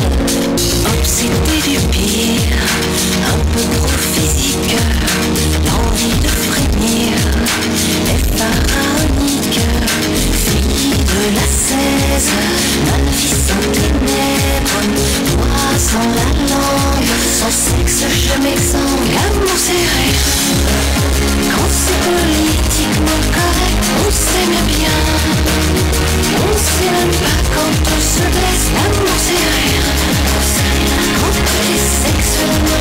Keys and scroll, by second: 2.9 u, 3.3 Down, 4.7 Down, 4.7 Return, 22.7 Page_Down, 32.7 space.